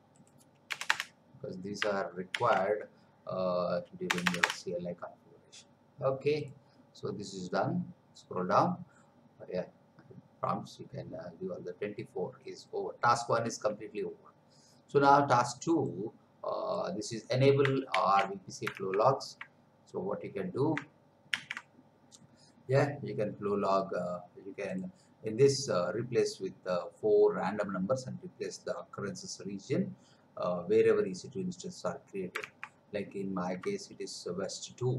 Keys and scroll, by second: 0.7 Return, 2.3 ctrl+v, 4.1 Return, 17.9 ctrl+c, 18.9 alt+Tab, 21.3 ctrl+v, 32.6 alt+Tab.